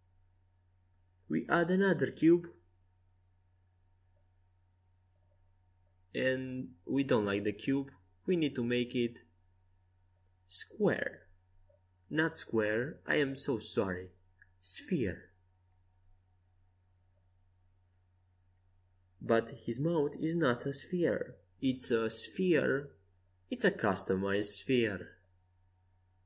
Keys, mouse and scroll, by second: 1.4 shift+a, 7.9 w, 8.8 Tab, 9.3 w, 12.9 click, 13.3 w, 16.8 click, 17.5 Tab, 18.9 Tab, 20.2-21.5 drag, 20.2 a.